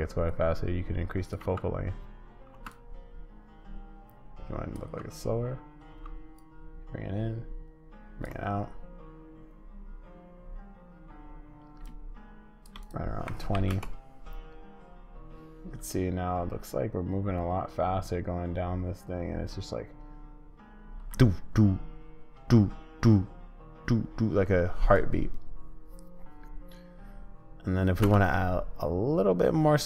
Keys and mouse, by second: 0.4 click, 1.4 space, 2.5 space, 4.8 space, 5.9 space, 6.5-8.3 drag, 8.3 space, 11.8 shift+click, 12.8-28.0 drag, 28.0 space.